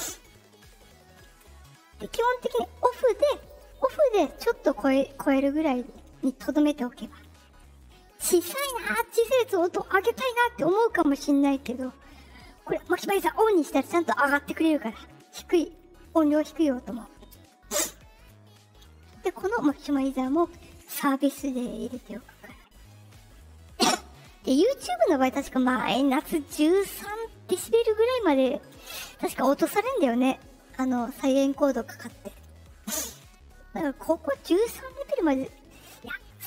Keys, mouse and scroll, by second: 3.3 click, 16.0 click, 34.0 click.